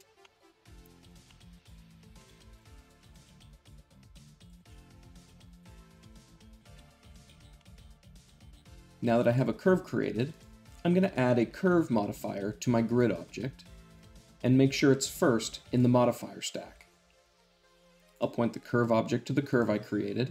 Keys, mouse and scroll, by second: 0.0 middle click, 0.1-0.5 shift+middle drag, 0.6 Tab, 1.0 click, 1.2 middle click, 2.1 g, 2.5 click, 3.0 shift+click, 3.1 g, 3.2 middle click, 4.3 click, 4.5 Tab, 4.6-5.0 middle drag, 5.1-5.4 middle drag, 5.5 `, 5.7 Tab, 5.9 a, 6.0 s, 6.5 click, 6.6 g, 7.0 click, 7.3 Tab, 7.5-8.2 shift+middle drag, 9.0-10.1 drag, 12.6-13.7 drag, 14.2-15.2 drag, 17.9-19.0 drag, 19.3-20.3 drag.